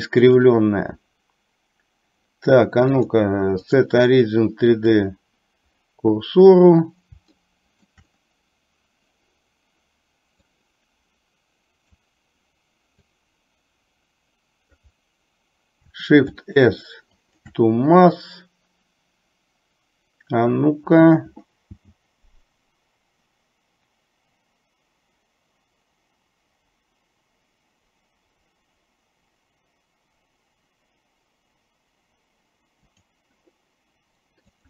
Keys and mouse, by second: 3.1-5.1 drag, 7.4 shift+middle click, 10.8-12.1 drag, 13.3-14.9 drag, 16.3 shift+s.